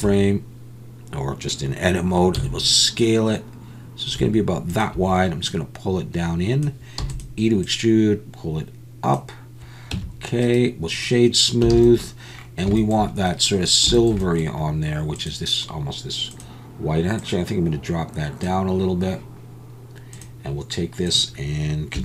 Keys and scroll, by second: 2.4 s, 7.0 e, 9.9 Tab, 11.7 alt+a.